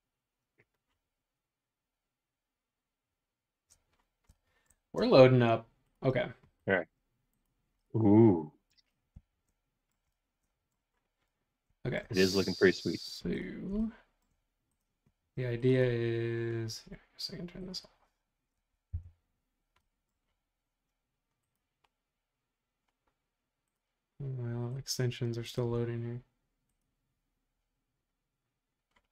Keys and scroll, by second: 19.0 i.